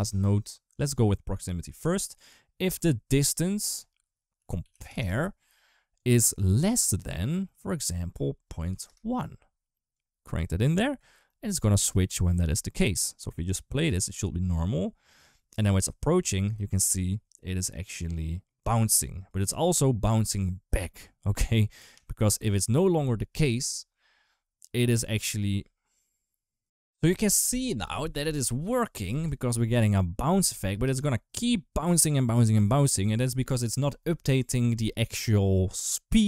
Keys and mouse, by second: 1.2 click, 1.5-2.6 drag, 3.2-5.9 drag, 6.3 click, 7.6-8.7 drag, 9.7 click, 11.6 click, 13.3 click, 13.7 space, 16.2 space, 19.0 click, 28.9 space, 30.5 space.